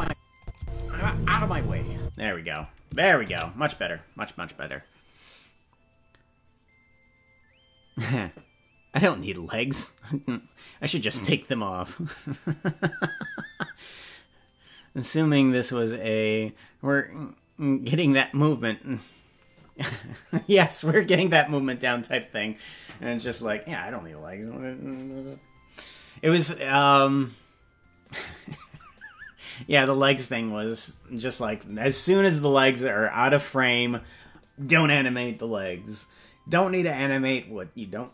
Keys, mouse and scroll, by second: 0.4 click, 0.5 space, 2.0 space, 5.6 ctrl+s.